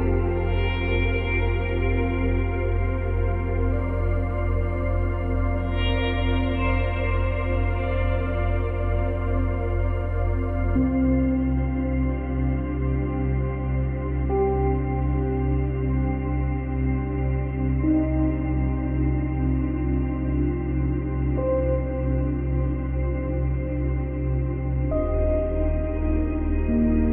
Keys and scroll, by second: 4.7 space, 7.6 space, 7.8 ctrl+z, 13.5 space, 20.2 space.